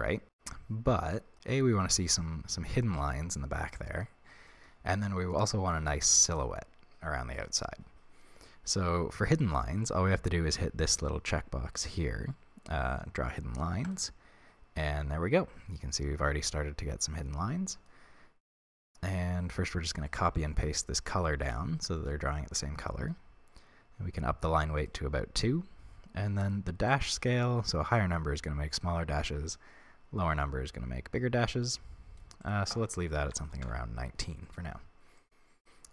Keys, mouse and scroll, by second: 13.8 click, 14.7-16.8 middle drag, 18.8-20.2 scroll down 2, 20.2 ctrl+c, 21.3 ctrl+v, 22.0 middle click, 22.8-24.7 middle drag, 24.7 click, 26.8-35.1 drag, 33.7 Return, 35.1-35.9 middle drag.